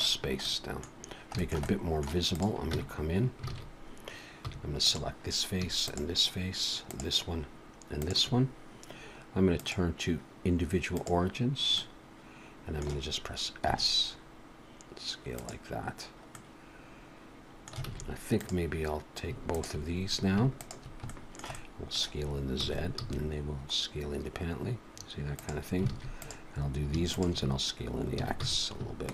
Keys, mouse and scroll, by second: 0.2 scroll up 2, 0.4 middle click, 1.0-1.3 scroll down 2, 1.4 shift+middle click, 1.7 middle click, 2.3 click, 2.7 Tab, 3.5 alt+a, 4.4 3, 4.8 click, 5.9 shift+click, 6.9 shift+click, 8.0 shift+click, 9.5 click, 11.8 middle click, 13.7 s, 16.3 middle click, 17.8 alt+a, 18.4 click, 19.5 shift+click, 20.7 click, 21.1 shift+middle click, 21.5 middle click, 22.6 s, 25.9 alt+a, 26.2 click, 27.1 shift+click, 28.1 s.